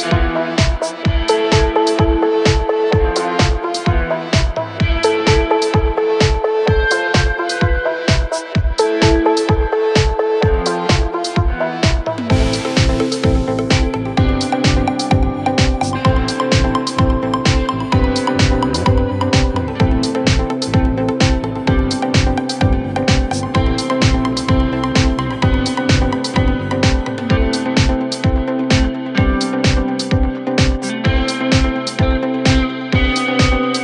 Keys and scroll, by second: 20.6 f, 21.5 f, 22.5 f, 28.3 F9, 30.6 F1.